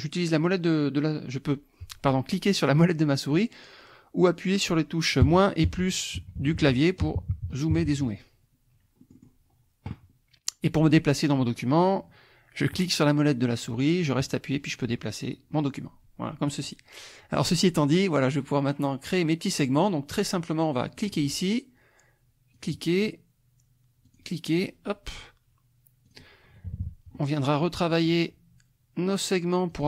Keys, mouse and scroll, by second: 5.2 KP_Subtract, 5.6 KP_Add, 6.2 KP_Subtract, 7.0 KP_Add, 7.7 KP_Subtract, 9.0 click, 12.7-16.6 drag, 17.4 click, 21.0 click, 22.5 click, 24.1 click, 24.6 click, 26.1 click, 26.7 KP_Subtract, 27.4 click, 27.9 click, 29.7 click.